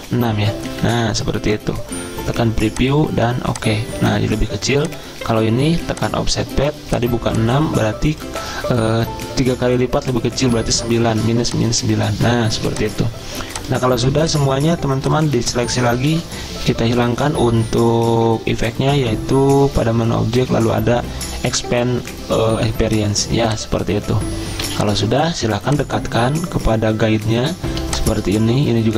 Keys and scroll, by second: 0.8 6, 10.5 9, 16.1 ctrl+z, 24.6 z, 25.3 v, 27.7-28.6 typing.